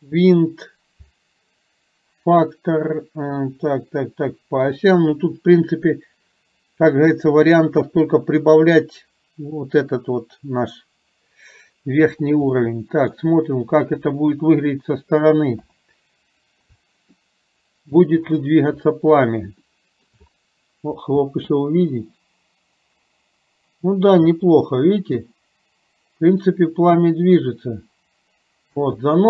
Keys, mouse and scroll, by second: 12.6-13.3 middle drag, 15.6 KP_7, 17.2-18.0 shift+middle drag, 19.8 shift+middle click, 21.3 space, 28.8 space.